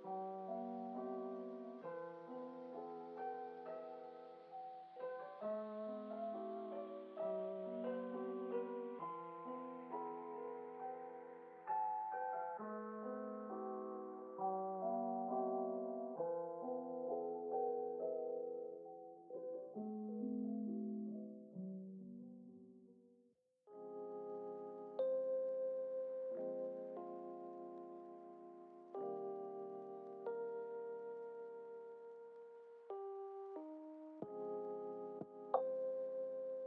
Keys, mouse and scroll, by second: 0.7 d, 2.2 s, 4.0 s, 4.2 s, 4.9-7.1 drag, 10.8 click, 11.8 click, 16.5-18.7 drag, 22.3 drag, 24.5 scroll down 2, 25.9-28.9 drag, 25.9-27.1 scroll down 1, 29.7-31.1 drag, 32.3 click, 33.1 ctrl+z, 34.1 ctrl+z, 35.9-36.6 drag.